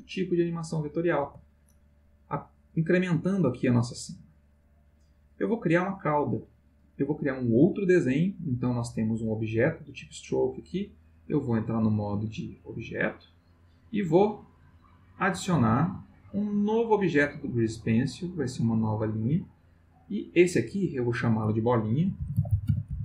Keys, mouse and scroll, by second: 1.2 space, 2.7-6.2 drag, 11.8 click, 12.9 click, 15.4 click, 18.5 click, 20.2 click, 20.8 click, 21.9-23.0 typing.